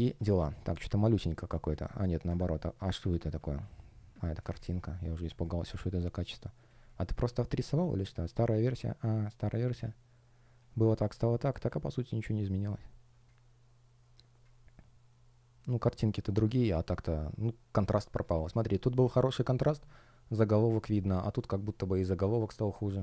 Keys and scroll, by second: 0.7 shift+0, 1.0 space, 2.1 super+\, 3.3 shift+щ, 4.5 space, 6.3 shift+o, 6.6 space, 7.4 space, 22.5 space.